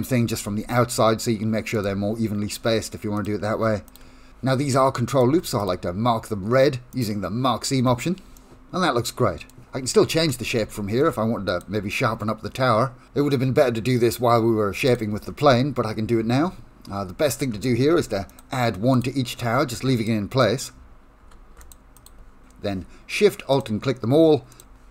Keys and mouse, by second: 3.2 alt+shift+click, 5.6-7.1 right drag, 8.5-9.5 middle drag, 10.6 ctrl+r, 17.8 ctrl+r, 19.6 ctrl+r, 21.2 ctrl+r, 22.4 alt+shift+click.